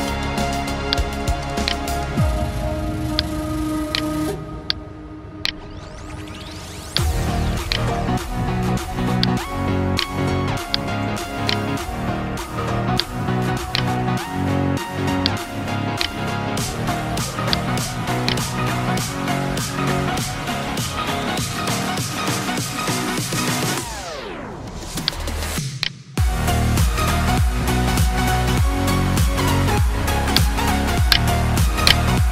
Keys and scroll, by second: 28.8 ctrl+z.